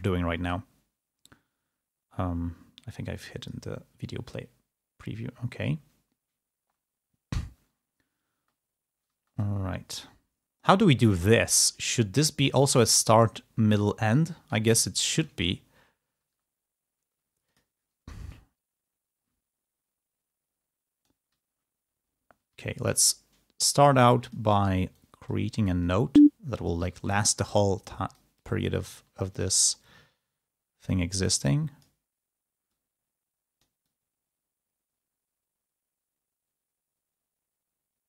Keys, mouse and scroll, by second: 3.4 click, 4.7 scroll up 2, 5.3-5.6 scroll up 2, 5.6 scroll down 2, 8.5 space, 9.2 space, 9.6-12.7 drag, 13.6 click, 14.8 ctrl+scroll up 2, 16.3 space, 17.3 click, 17.3 space, 18.4-21.6 drag, 22.4 d, 23.6-25.5 drag, 26.7 g, 28.2 click, 29.8-31.9 drag, 32.8-38.0 drag.